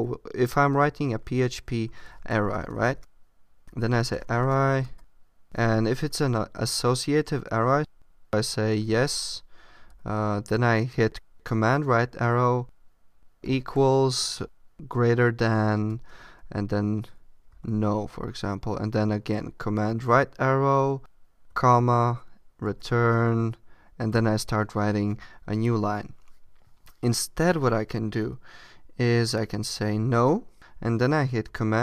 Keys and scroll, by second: 4.4 space, 4.5 shift+(, 4.7 Return, 5.8 Up, 6.1 Tab, 9.8 super+Right, 14.2 shift+., 19.4 super+Right, 22.5 Return.